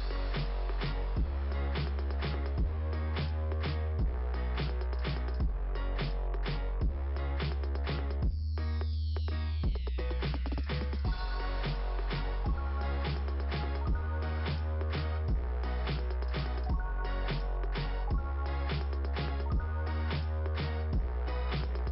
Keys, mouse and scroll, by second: 0.0 click, 0.3 click, 0.6 click, 0.8 click, 1.0 click, 1.3 click, 8.2 click, 8.4 click, 8.5 click, 8.7 click, 8.8 click, 8.9 click, 9.1 click, 9.2 click, 11.2-14.7 typing, 16.2 click, 16.3 click, 16.5 click, 16.6 click, 16.8 click, 16.9 click, 19.9 click, 20.0 click, 20.2 click.